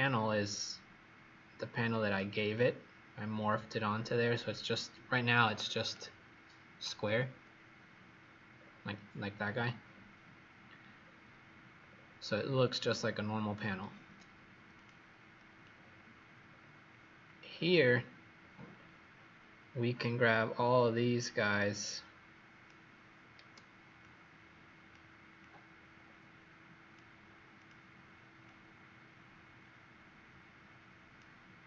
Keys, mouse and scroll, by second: 8.4-9.7 scroll down 5, 9.7-10.9 scroll up 1, 10.9-11.7 scroll down 3, 11.7 scroll up 1, 13.3-14.7 scroll down 1, 14.7 click, 15.7 scroll down 3, 16.4 scroll up 1, 17.4-19.2 scroll down 1, 19.2-20.7 scroll down 1, 20.7-21.3 scroll up 2, 21.3 click, 23.9 click, 31.5-31.6 scroll down 3.